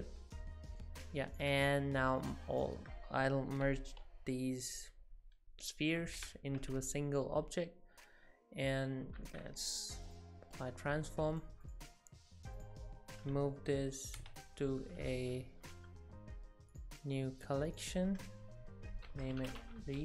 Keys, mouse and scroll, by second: 0.9 middle click, 1.3 click, 1.6 shift+click, 2.2 shift+click, 6.0 ctrl+j, 9.2 ctrl+a, 11.3 click, 11.7 click, 11.9 click, 14.2 m.